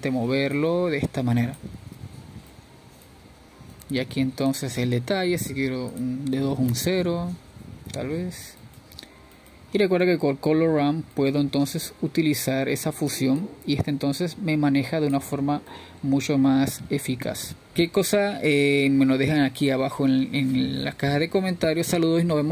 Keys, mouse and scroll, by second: 1.0-2.1 scroll up 1, 2.1-3.4 drag, 3.4 ctrl+z, 3.9-5.1 drag, 5.1 ctrl+z, 5.8-7.8 middle drag, 7.8-10.8 drag, 10.8 scroll up 2, 11.3-14.2 scroll down 1, 14.2 scroll up 3, 14.4-15.1 middle drag, 15.1-19.1 drag, 19.1-21.1 middle drag, 21.1 scroll down 2, 21.4-21.8 middle drag, 21.8-22.5 scroll up 2.